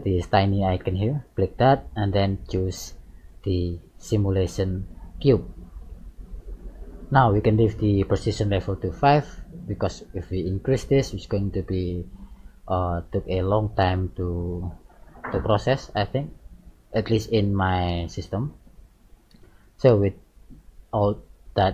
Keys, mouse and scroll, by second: 1.3 click, 11.8 middle click, 17.3 middle click.